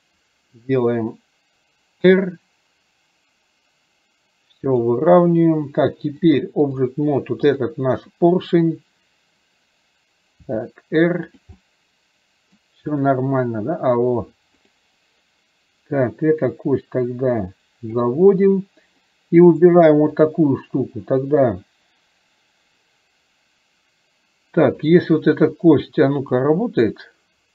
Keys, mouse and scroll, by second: 6.4 click, 7.5 click, 11.6-12.6 middle drag, 14.8 click, 16.5 click, 16.8-18.0 drag, 19.8-20.4 drag, 24.8 click, 26.5-27.5 drag.